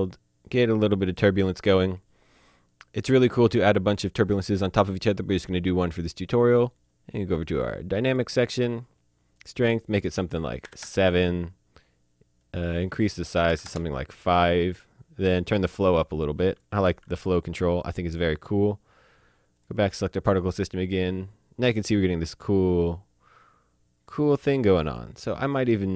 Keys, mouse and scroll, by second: 7.6 click, 10.7 KP_7, 10.8 KP_Enter, 12.9 click, 13.5 KP_5, 14.8 KP_Enter, 15.3 click, 16.9 alt+a, 17.3 click, 19.6 click, 24.9 click.